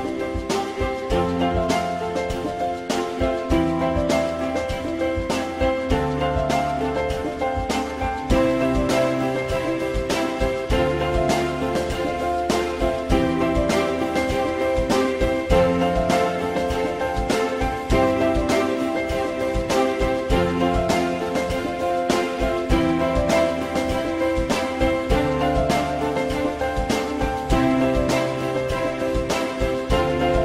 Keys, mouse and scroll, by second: 9.2 alt+middle click, 11.0 z, 13.7 z, 17.6 click, 23.3 click, 24.7 e, 25.5 click, 26.9-29.1 drag.